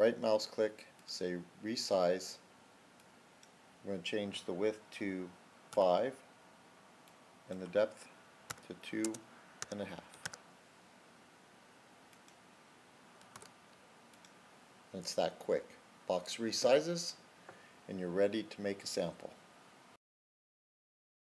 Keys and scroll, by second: 5.7 typing, 8.3 typing, 9.5 1, 10.0 /, 10.1 2, 12.2 typing, 13.2 typing.